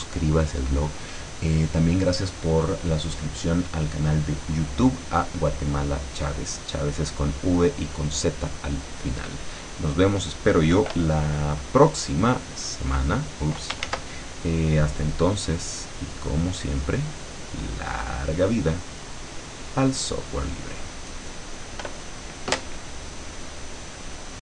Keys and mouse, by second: 12.8 click, 13.9 ctrl+z, 15.2-16.7 drag, 16.9 click, 17.9 click, 18.9 click, 20.2 click.